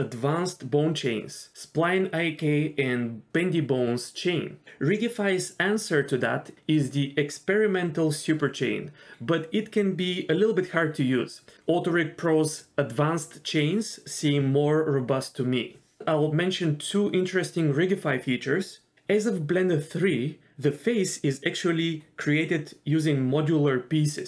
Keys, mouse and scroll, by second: 7.8 d, 8.3-9.6 drag, 9.6-12.3 typing, 11.4-12.3 drag, 15.3 ctrl+z, 15.6 ctrl+z, 22.0 shift+middle click.